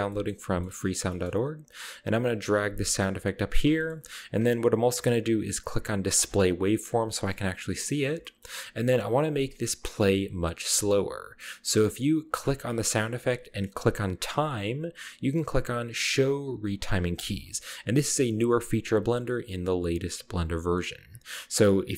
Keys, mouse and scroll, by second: 0.3-1.9 middle drag, 2.2 g, 3.6 drag, 3.8 middle click, 4.0 g, 4.3 click, 4.4-4.7 middle drag, 6.2 click, 6.7-8.1 scroll up 2, 7.4-8.9 middle drag, 8.1-8.9 scroll down 1, 9.5 click, 10.0 middle click, 12.3 g, 13.2 click, 14.7-15.6 scroll down 1, 17.2-17.9 drag, 18.9 click, 20.4 click, 21.0 scroll down 1, 21.2-21.9 scroll up 1.